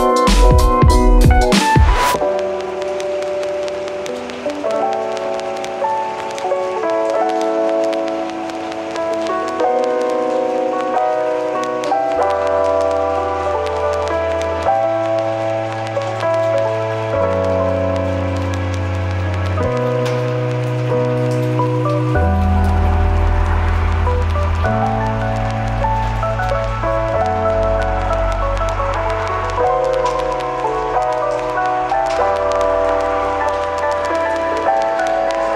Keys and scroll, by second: 5.3 super+z, 16.4 f, 22.0 super+s, 22.4 Right, 22.7 BackSpace, 23.0 4, 23.0 Return.